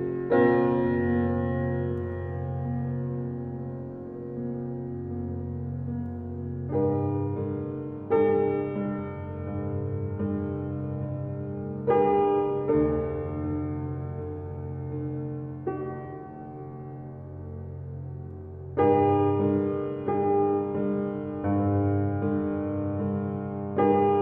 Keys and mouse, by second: 0.7-2.8 drag, 4.3 click, 6.5 click, 8.0-9.0 drag, 11.6 click, 12.7 1, 12.9 Return, 14.2 click, 15.3 3, 15.5 Return, 16.3 click, 16.7 click, 19.1 click, 20.1 click, 20.9 click, 21.6-23.1 drag, 23.3 click, 23.5 click.